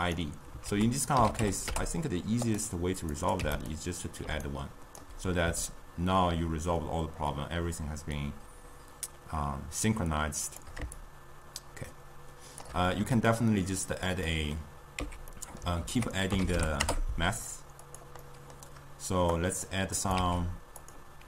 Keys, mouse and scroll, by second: 0.8 ctrl+a, 3.3 click, 4.4 d, 4.7 right click, 5.1 d, 5.8-8.8 shift+drag, 11.1-13.0 shift+drag, 13.0-13.8 middle drag, 13.8 click, 14.5 middle click, 15.1 x, 15.4 middle click, 15.9 ctrl+a, 18.3-19.5 middle drag, 19.5-20.2 drag, 20.3 shift+d.